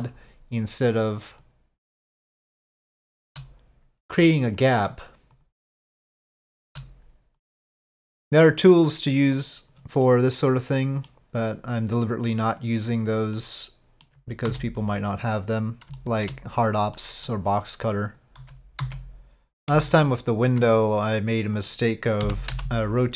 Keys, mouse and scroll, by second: 1.4-2.8 drag, 3.0 shift+middle drag, 4.6-5.4 drag, 6.3-6.7 shift+middle drag, 7.3 click, 8.8 click, 10.1-11.1 middle drag, 12.0-13.3 drag, 13.4 middle click, 14.5 s, 16.0 shift+middle drag, 17.0 middle drag, 18.0 click, 18.6 ctrl+z, 18.8 ctrl+z, 19.7 ctrl+z, 21.5 click.